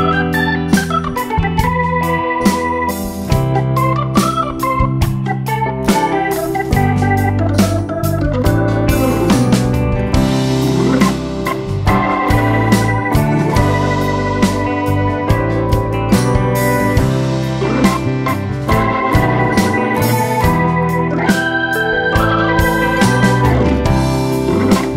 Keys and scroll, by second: 1.8 space, 10.9 Escape, 18.9 super+-, 20.1 super+d, 20.8 space.